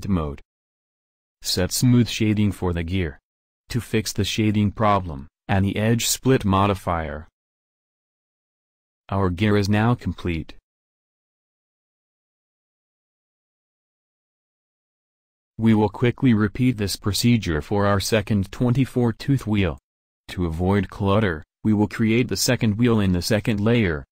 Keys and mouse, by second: 1.7-3.5 drag, 4.2-6.0 drag, 8.1-8.5 drag, 16.0 KP_7, 19.5 shift+a, 23.7 alt+Tab, 23.9 alt+Tab.